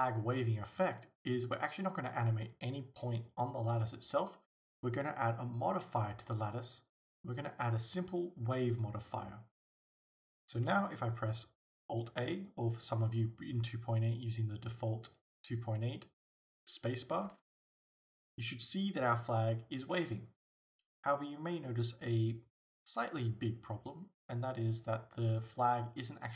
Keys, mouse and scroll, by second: 9.7-26.3 drag, 9.7 scroll down 1, 17.3 alt+a.